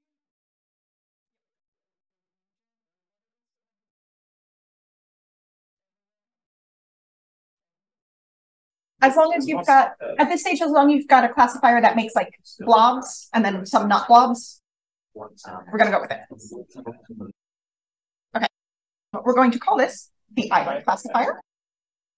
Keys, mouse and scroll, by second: 0.0-0.6 scroll down 1, 3.1 click, 3.1-4.8 scroll down 1, 4.0 c, 8.0-8.5 scroll down 2, 8.7-10.2 scroll up 2, 10.2-14.1 scroll up 1, 14.1-16.4 scroll up 1, 16.4-17.6 scroll up 1, 17.6-18.4 typing, 19.5 click.